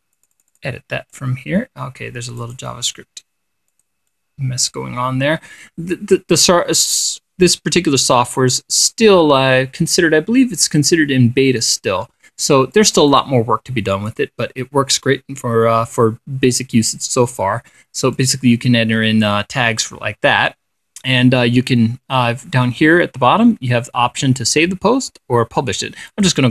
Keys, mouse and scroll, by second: 0.1 click, 0.6 click, 1.6 click, 2.9 click, 4.2 click, 4.6 click, 13.2 click, 14.6 click, 18.6-20.0 drag.